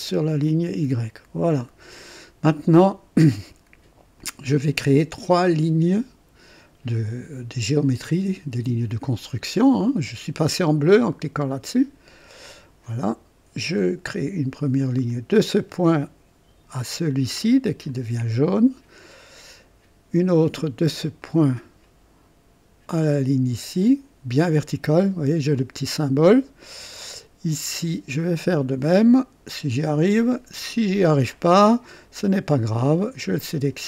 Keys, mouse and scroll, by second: 0.4 right click, 2.0 right click, 4.2 click, 12.4 click, 15.1 click, 17.9 click, 21.2 click, 23.8 click, 28.3 click, 31.3 click, 32.0 right click, 33.4 click.